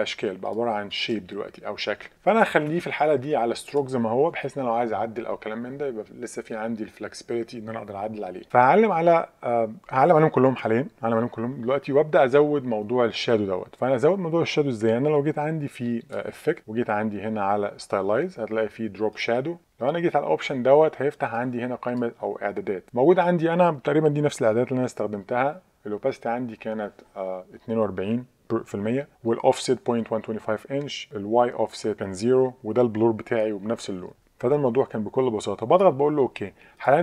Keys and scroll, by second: 2.1 super+z, 2.7 super+z.